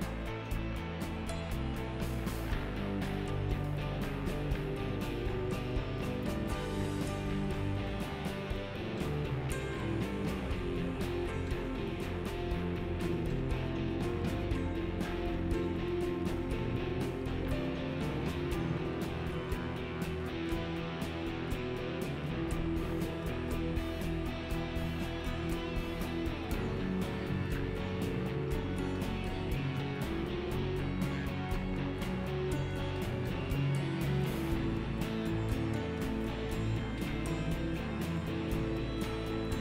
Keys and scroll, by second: 27.3 alt+x, 28.6 alt+x, 36.8 f, 39.5 f.